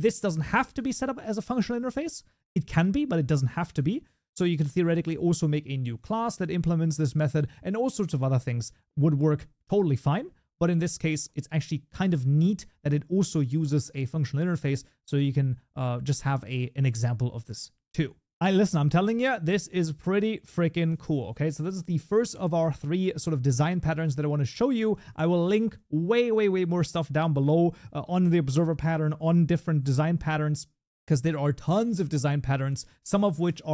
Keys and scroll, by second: 23.0 ctrl+s.